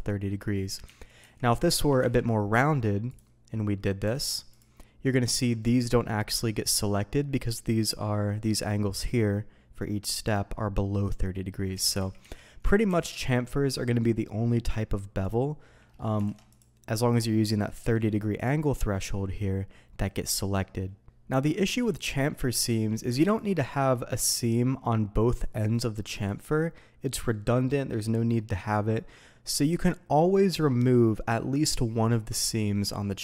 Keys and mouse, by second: 0.3 middle drag, 0.8 ctrl+z, 1.2 ctrl+z, 1.5 ctrl+z, 2.0 ctrl+b, 3.0 click, 4.1 alt+a, 4.5-5.3 drag, 5.6 middle click, 6.1 middle click, 8.3 middle click, 11.3 middle drag, 11.7 ctrl+z, 12.0 ctrl+z, 12.2 ctrl+z, 12.8 ctrl+b, 15.2 click, 15.8 middle click, 16.2 alt+a, 16.5-17.2 drag, 17.4 middle click, 17.9 alt+a, 18.3-19.0 drag, 21.7 middle click, 22.7 ctrl+e, 25.3 click, 26.2-27.8 middle drag, 31.4 middle drag, 32.1 middle click, 33.1-33.2 middle drag.